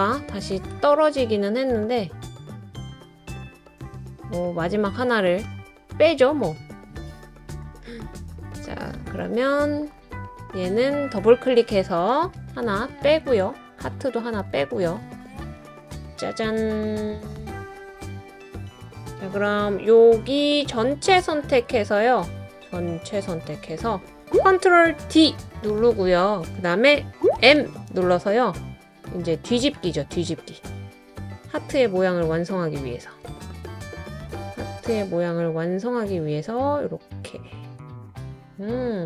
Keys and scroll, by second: 12.6 BackSpace, 14.4 BackSpace, 25.0 super+d, 27.3 m.